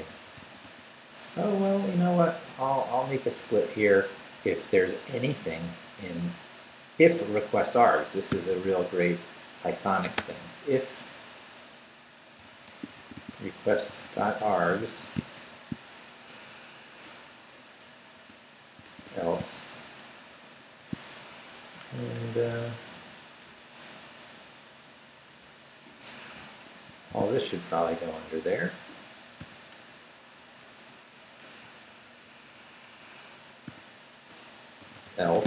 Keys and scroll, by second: 0.0-3.3 typing, 8.0-9.0 typing, 10.1 space, 12.1-15.8 typing, 17.1 Return, 18.0-19.5 typing, 20.6 shift+;, 21.7 shift+BackSpace, 22.7 BackSpace, 23.4 BackSpace, 24.7 Down, 25.3 Left, 25.9 Left, 26.2 Escape, 26.9 shift+Escape, 27.1 shift+v, 27.3 shift+Down, 28.8 shift+Down, 29.4 shift+., 30.3 shift+Left, 31.2 Up, 31.6 Down, 32.3 Down, 33.0 Escape, 33.6-35.4 typing.